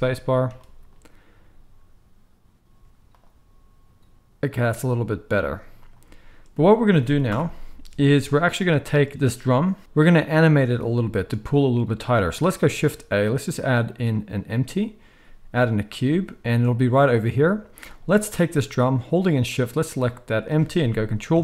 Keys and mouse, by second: 2.7 z, 5.4 z, 6.8 space, 7.3 shift+Left, 9.1-17.8 middle drag, 12.6 shift+a, 17.8 click, 17.9-19.4 middle drag, 19.4 shift+click, 19.6-21.4 shift+middle drag, 21.3 ctrl+p.